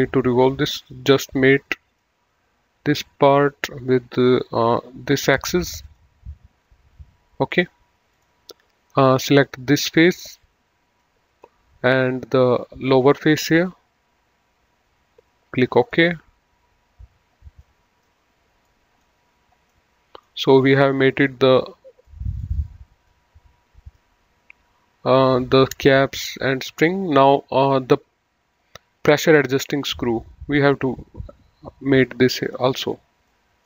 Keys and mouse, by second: 0.4 click, 1.8 click, 5.5 click, 8.1 click, 9.6 click, 11.0 middle click, 13.3 click, 15.6 click, 17.6 middle click, 22.0 middle click, 26.2 middle click, 31.8 click, 33.3 middle click.